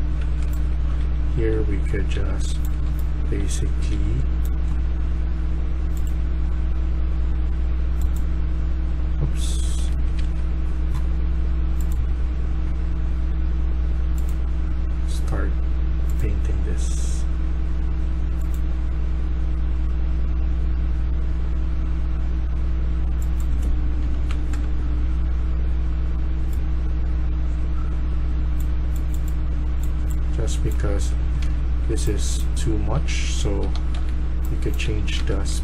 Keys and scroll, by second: 0.0-3.9 typing, 9.9 Escape, 10.1 Escape, 23.9-24.2 typing, 24.4 Return, 30.9-35.6 typing.